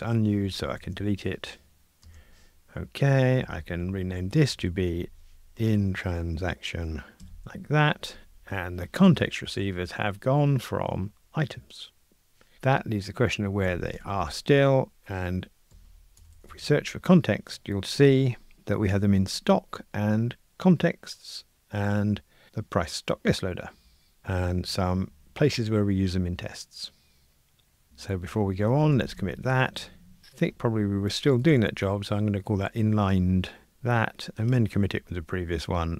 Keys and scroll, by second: 7.2 shift+F6, 13.7 shift+super+f, 27.9 shift+super+k, 28.9 super+k, 34.5 ctrl+alt+m.